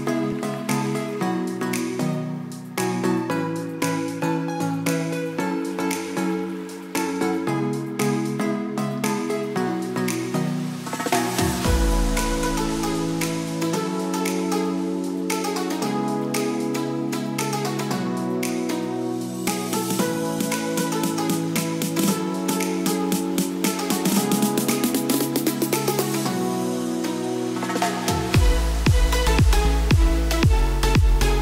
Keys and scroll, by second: 1.4 s, 3.2 ctrl+shift+a, 4.1 n, 5.7 s, 8.7 s, 9.9 n, 10.6 s, 13.1 ctrl+d, 18.5 ctrl+shift+s, 22.0 n, 22.7 s, 24.3 ctrl+KP_Subtract, 26.9 ctrl+d.